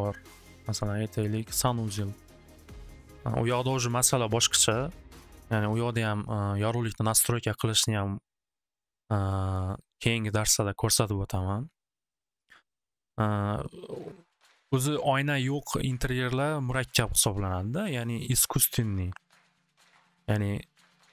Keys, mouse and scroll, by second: 0.7 click, 1.1 click, 1.8 click, 4.9 click, 5.4 click, 9.2 click, 9.6 click, 12.1 click.